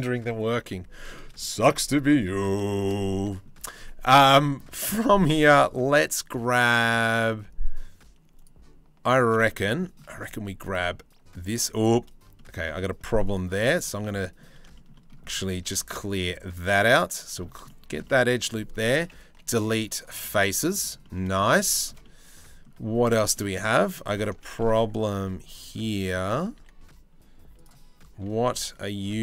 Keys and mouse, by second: 0.6 middle click, 1.1 shift+middle click, 1.6 Tab, 1.9 middle click, 2.3 shift+middle click, 2.9 middle click, 3.2 2, 4.4 shift+middle click, 9.1 middle click, 9.4 shift+middle click, 10.3 alt+middle click, 12.0 shift+middle click, 13.6 middle click, 14.3 shift+middle click, 15.2 3, 16.1 click, 17.3 middle click, 18.9 Delete, 19.8 middle click, 21.5 shift+middle click, 21.6 middle click, 23.0 middle click, 23.8 alt+click, 24.8 1, 26.2 3, 27.2 click.